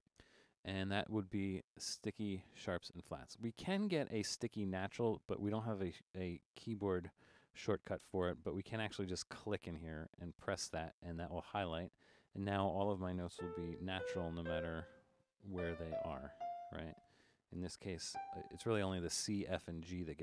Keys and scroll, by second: 0.0-4.9 typing, 7.2 alt+-, 13.4-16.9 typing, 17.9-18.7 typing.